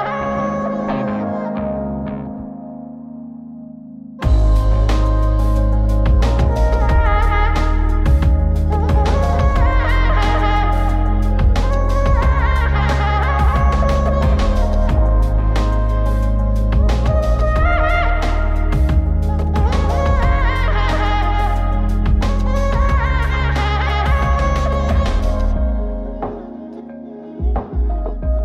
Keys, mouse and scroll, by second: 1.3-1.9 scroll down 2, 2.3-4.4 drag, 5.5-13.3 drag, 13.7-14.0 scroll up 2, 14.1 shift+middle click, 15.6-17.6 drag, 17.9 middle click, 18.9 scroll up 2, 19.5-22.5 drag, 22.8-23.3 scroll up 2, 23.3-23.7 scroll down 2, 23.7-24.8 middle drag, 25.1-25.4 scroll up 1, 25.5-27.5 middle drag, 27.9 click.